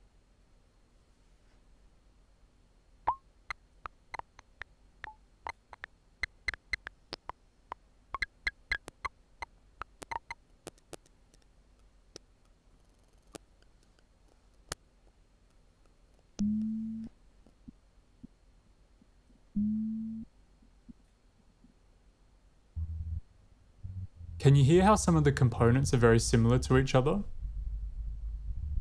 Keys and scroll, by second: 0.0-0.1 typing, 2.8 typing, 17.6-18.2 typing, 21.7 space, 22.6 w, 24.3 typing.